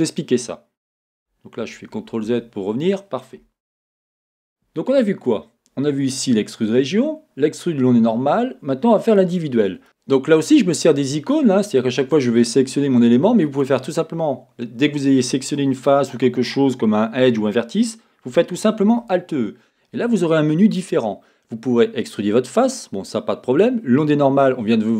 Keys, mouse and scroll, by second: 1.6 z, 3.4 a, 5.3-9.8 drag, 12.0-13.6 drag, 18.8 alt+e.